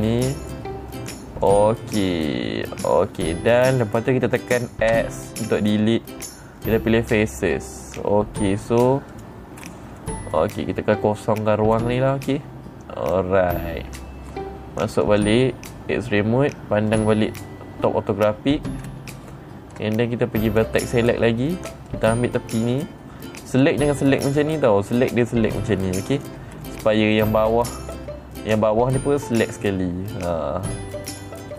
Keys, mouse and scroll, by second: 1.9 click, 2.5-4.3 middle drag, 5.4 x, 7.7 click, 9.6 click, 10.1 middle click, 10.1 scroll up 3, 10.5 middle click, 12.3-13.6 middle drag, 15.5 click, 17.4 click, 19.3 scroll down 3, 21.0 click, 22.4 click, 24.0 click, 25.5-26.7 drag, 27.1 middle click, 28.4 middle click.